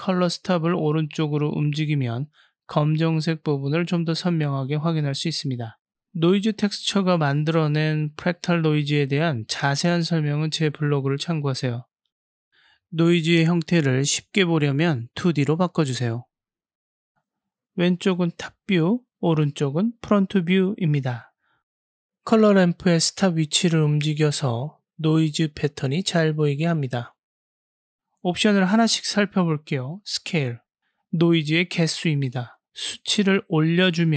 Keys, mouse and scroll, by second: 2.7 click, 2.9 click, 15.0-16.5 drag, 21.0 click, 22.5-23.6 drag, 24.4-26.8 drag, 27.4 click, 29.4-32.5 drag, 33.4-34.1 drag.